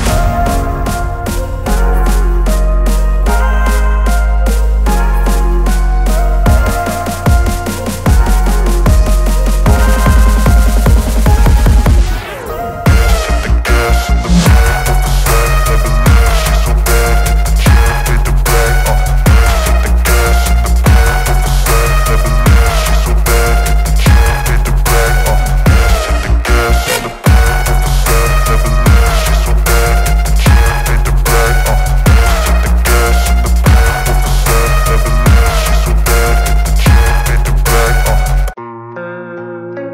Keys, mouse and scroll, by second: 5.5 click, 8.6 v, 9.4 ctrl+0, 11.8-16.9 drag, 19.9 ctrl+t, 22.4-23.4 drag, 23.8-24.5 alt+scroll down 2, 24.5-25.9 drag, 36.6 ctrl+0, 38.1 v.